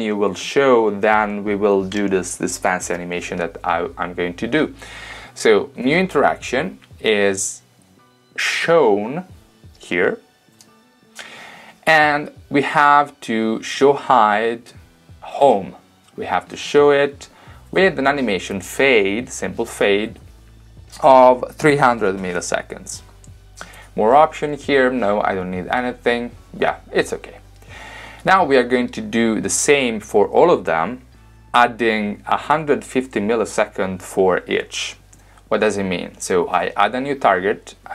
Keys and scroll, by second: 21.9-22.9 typing.